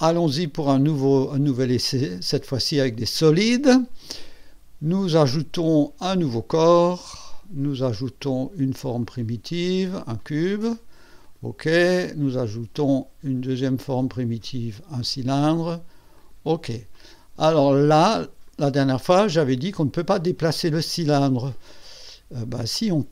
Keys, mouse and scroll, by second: 1.4 click, 6.8 click, 9.0 click, 10.2 click, 11.2 click, 13.5 click, 15.0 click, 16.2 click, 16.9-18.7 drag, 19.7 click.